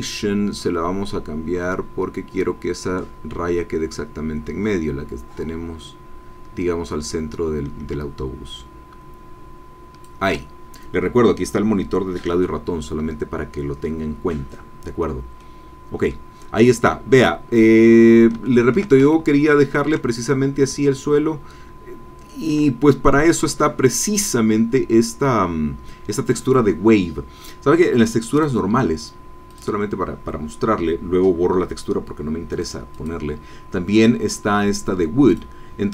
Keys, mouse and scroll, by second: 15.4-16.6 drag, 16.8-17.3 scroll down 1, 17.5-18.3 scroll down 1, 18.4 shift+click, 19.1 ctrl+shift+middle click, 19.2 ctrl+shift+scroll up 1, 19.3-20.4 ctrl+drag, 20.8-22.7 shift+middle drag, 23.1-23.5 scroll up 1, 23.5 click, 23.8 click, 28.3 click, 29.4 click, 32.8 click, 35.3 click.